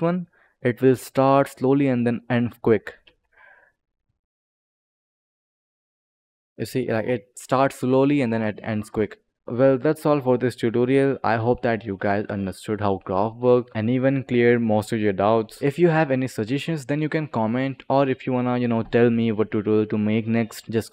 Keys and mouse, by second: 2.7 click, 2.9 space, 4.9 click.